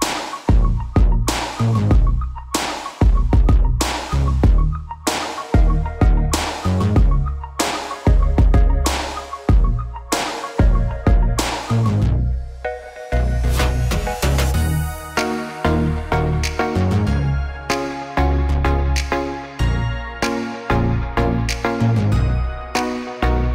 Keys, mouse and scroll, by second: 0.1 middle click, 0.3 middle click, 3.3 click, 5.5 click, 9.0-11.1 drag, 11.1-12.0 middle drag, 12.0 click, 12.3-12.6 middle drag, 12.5 Tab, 13.2-14.2 middle drag, 14.6 middle click, 15.2 middle click, 15.5 middle click, 16.3 middle click, 16.7 middle click, 19.2-21.3 middle drag, 21.1 ctrl+r, 21.4 middle click.